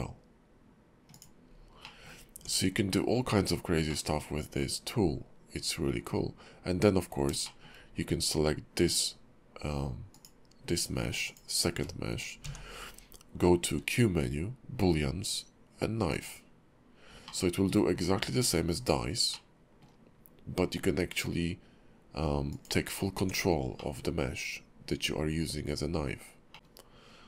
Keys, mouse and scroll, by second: 1.5 scroll down 3, 1.8 middle click, 2.3 Tab, 3.2-3.7 scroll up 1, 3.9 middle click, 7.1 scroll up 2, 7.4 shift+middle click, 10.1 click, 11.2 shift+click, 12.4 q, 17.3 middle click, 17.8 scroll down 2, 18.7-19.3 scroll down 2, 19.3 middle click, 20.1-21.8 scroll up 3, 22.6 click, 22.9 scroll up 2, 23.1 Tab, 23.8 middle click, 24.4 scroll down 3, 26.5 middle click, 26.5 click, 26.5-27.2 scroll up 2, 26.5 KP_5, 26.5 x.